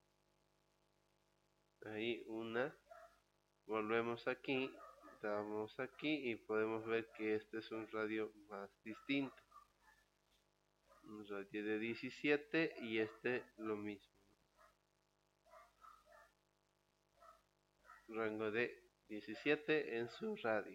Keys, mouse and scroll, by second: 3.3 click, 5.4 click, 9.4 click, 11.6 click, 14.9 click, 17.0 click.